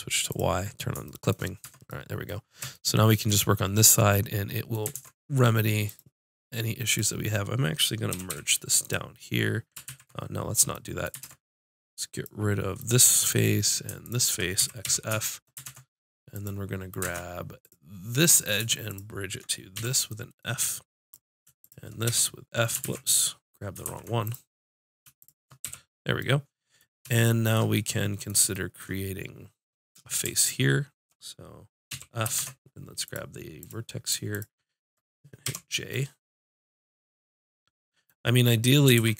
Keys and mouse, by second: 1.7 Tab, 2.8 click, 5.0 ctrl+Tab, 6.0-8.1 drag, 8.1 g, 9.9 ctrl+z, 11.2 ctrl+Tab, 12.7 click, 14.7 x, 14.9 click, 15.7 ctrl+Tab, 17.0 ctrl+Tab, 19.7 click, 19.8 f, 21.0-22.1 drag, 22.1 f, 22.8 ctrl+z, 23.9 ctrl+z, 24.3 click, 25.7 f, 30.4-31.9 drag, 31.9 f, 32.4 ctrl+Tab, 33.6-35.1 drag, 35.5 j, 35.8 click, 39.0 ctrl+z.